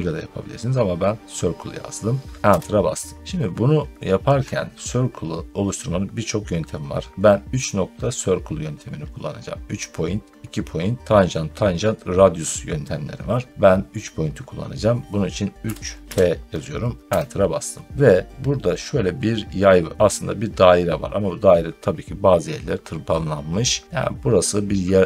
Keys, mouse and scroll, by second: 2.3 Return, 15.5-16.0 typing, 17.0 Return, 17.9 middle click, 18.1 middle click.